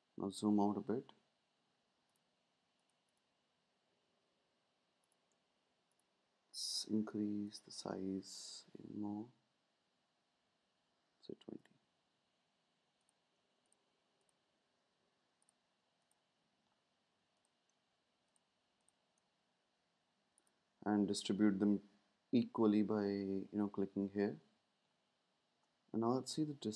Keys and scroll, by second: 8.5 Up, 8.6 typing, 10.4 typing.